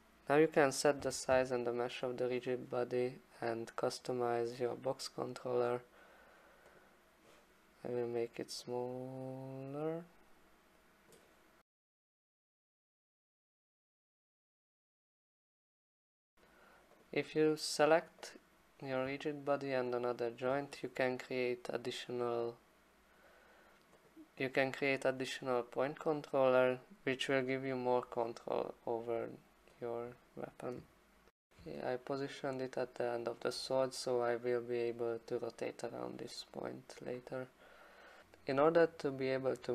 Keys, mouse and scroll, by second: 1.0 2, 1.3 Return, 3.5 click, 5.8 click, 6.8 click, 11.1 click, 12.0 click, 12.2 e, 12.5 click, 13.0 alt+click, 13.2 click, 13.3 alt+click, 13.4 alt+click, 14.7 click, 15.0 click, 15.0 w, 15.5 click, 16.0 alt+click, 17.0 click, 18.3 click, 24.1 click, 25.0 click, 26.8 click, 28.2 alt+click, 28.7 click, 29.1 click, 29.4 ctrl+c, 29.5 click, 29.6 ctrl+v, 30.1 ctrl+z, 30.3 click, 30.4 click, 30.6 click, 30.7 ctrl+c, 30.8 click, 30.9 ctrl+v, 31.5 click, 33.4 alt+click.